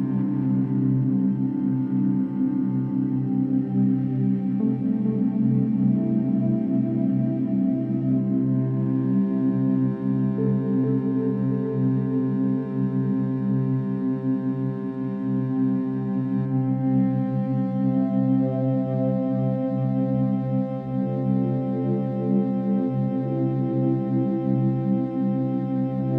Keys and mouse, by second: 2.3-3.1 drag, 3.9 ctrl+s, 6.1 click, 6.6-7.4 drag, 7.5 click, 9.6-10.1 alt+drag, 10.2-10.9 alt+drag, 10.9 1, 11.5 g, 12.3 Escape, 13.3 click, 14.4 g, 17.1-17.8 alt+shift+drag, 19.0 r, 19.3 x, 20.7-21.7 alt+drag, 22.7-23.3 alt+drag, 23.6 ctrl+alt+shift+drag, 24.2-25.8 ctrl+alt+drag.